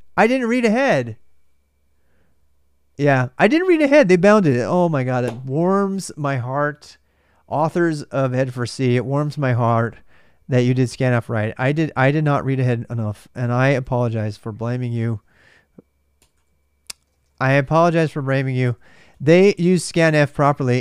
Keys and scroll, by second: 14.8-20.2 typing, 20.7 alt+Tab.